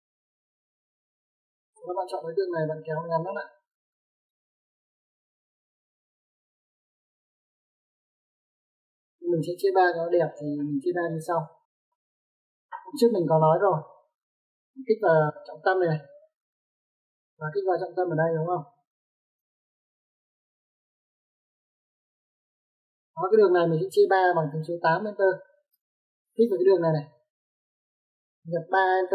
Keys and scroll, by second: 2.1 Escape, 9.2 Escape, 23.5 space, 25.8-26.5 typing.